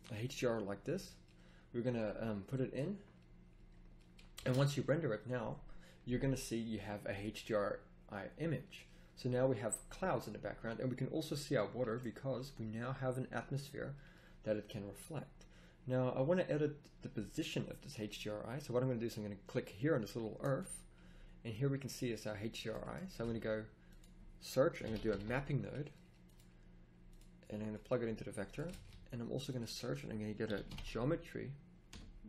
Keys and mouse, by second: 4.7 shift+z, 11.9-12.7 middle drag, 12.8-15.1 middle drag, 26.3 a, 28.8 a.